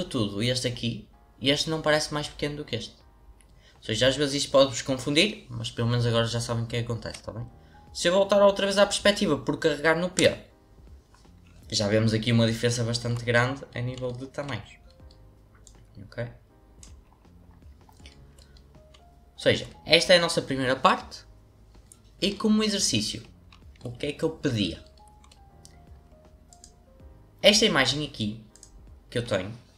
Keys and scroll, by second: 10.1 p.